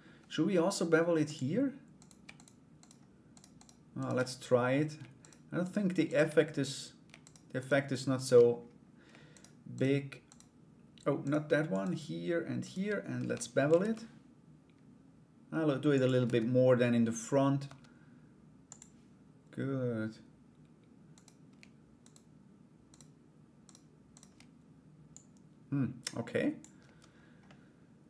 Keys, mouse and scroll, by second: 0.8 click, 1.5 right click, 1.9 shift+right click, 2.3 shift+right click, 2.9 shift+right click, 3.1 shift+right click, 3.5 shift+right click, 4.8 shift+right click, 5.2 shift+right click, 5.6 shift+right click, 6.8 shift+right click, 7.1 shift+right click, 7.7 shift+right click, 8.9 shift+right click, 9.3 shift+right click, 9.8 shift+right click, 10.8 shift+right click, 11.3 shift+right click, 12.2 shift+right click, 13.2 ctrl+b, 15.8 Tab, 18.2 click, 20.7 right click, 21.6 shift+right click, 22.5 shift+right click, 23.2 shift+right click, 23.7 shift+right click, 24.7-26.2 drag, 26.4 Tab, 27.0 middle click.